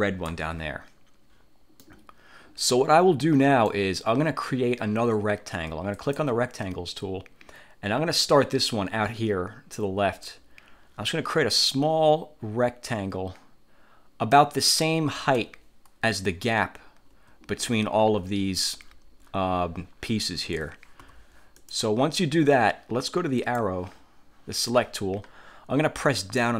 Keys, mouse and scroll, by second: 2.0 middle click, 2.8 click, 2.8 middle click, 3.3 click, 6.1 click, 10.4-14.6 drag, 16.2 Escape, 17.2 F1, 21.2 F4, 21.7 click, 23.5 click, 26.3-26.5 middle drag.